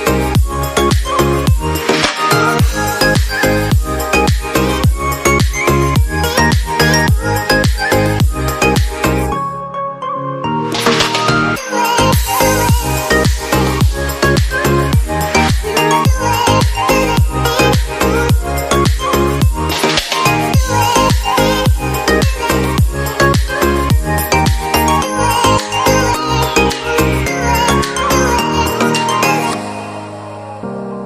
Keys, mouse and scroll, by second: 10.4 double click, 17.6 typing, 21.6 F8, 22.7 BackSpace, 24.7-28.7 typing, 30.3-31.0 typing.